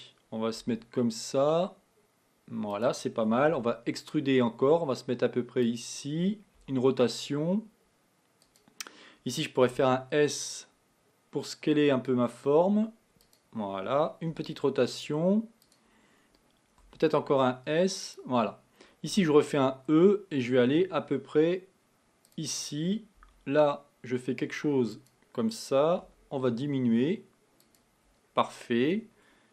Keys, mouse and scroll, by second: 0.6 g, 3.7 e, 6.9 r, 9.8 s, 14.4 r, 16.9 s, 19.2 e, 23.2 r, 26.1 s.